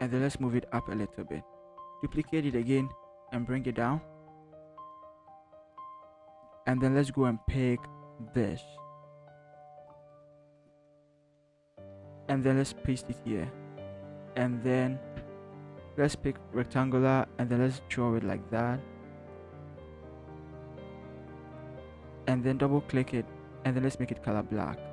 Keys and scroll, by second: 0.3 v, 0.7 Up, 1.0 Up, 2.0 ctrl+j, 2.5 v, 3.0 shift+Down, 3.6 Down, 4.0 Down, 10.2 ctrl+c, 12.6 ctrl+v.